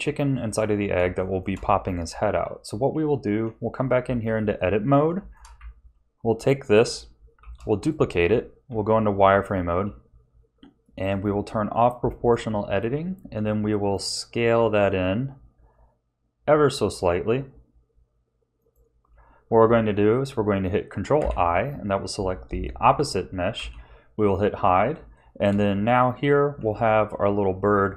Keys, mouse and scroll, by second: 1.2 shift+middle click, 2.3 ctrl+s, 2.9 Tab, 4.5 shift+middle click, 5.5 a, 7.4 shift+d, 8.2 z, 9.6 s, 11.7 click, 12.4 s, 21.1 ctrl+i, 23.5 h, 24.5-24.9 scroll up 2, 25.1 shift+middle click, 25.8 Tab.